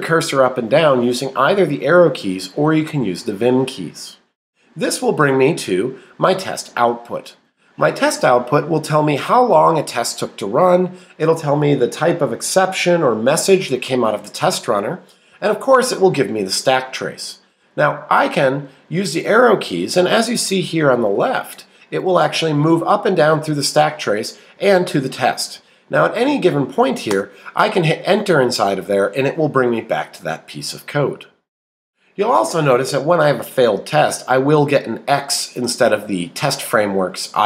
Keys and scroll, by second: 5.5 Down, 7.4 Up, 15.3 Down, 17.5 Up, 18.7 Down, 19.2 Up, 22.0 Down, 23.1 Up, 24.5 Down, 25.0 Up, 25.6 Down, 27.1 Return.